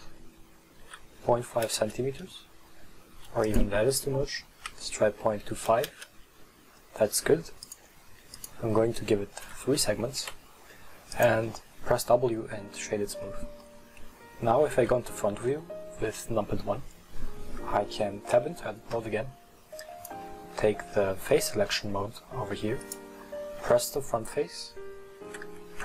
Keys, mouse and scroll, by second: 3.6-6.6 drag, 7.7-9.1 drag, 10.3 w, 12.7-13.4 middle drag, 13.4-13.7 scroll down 1, 13.7-14.8 middle drag, 14.8 KP_1, 16.8-18.4 scroll up 1, 18.4 Tab, 19.9 click, 22.9 right click.